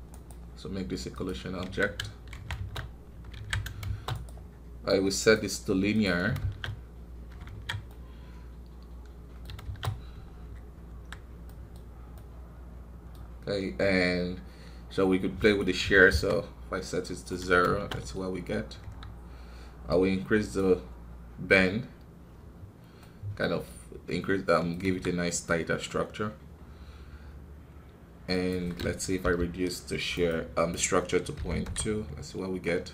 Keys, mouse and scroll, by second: 1.6 KP_1, 2.3 shift+Left, 2.5 shift+space, 3.4 alt+a, 3.8 shift+space, 4.1-6.3 right drag, 6.3 shift+space, 7.4 alt+a, 7.9-9.6 middle drag, 9.6 shift+space, 10.3 scroll up 2, 10.9 KP_1, 11.4 middle click, 11.8 scroll up 1, 12.1-18.3 middle drag, 18.3 scroll down 2, 18.8 KP_1, 19.9-23.1 drag, 23.1-24.8 middle drag, 24.8 KP_1, 28.3-32.9 drag.